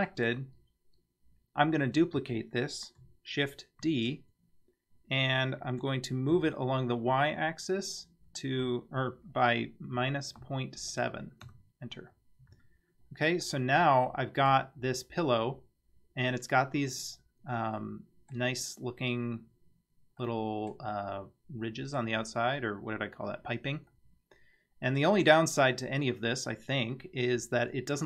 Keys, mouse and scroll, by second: 0.4 scroll down 3, 3.8 shift+d, 12.5 Tab, 13.0-13.5 scroll down 1, 13.5-14.5 middle drag, 14.8 scroll up 2, 16.2-16.5 scroll up 1, 17.2-17.8 scroll down 1, 17.8-18.4 middle drag, 20.2-20.7 middle drag, 21.7-22.0 middle drag, 23.9-25.0 middle drag.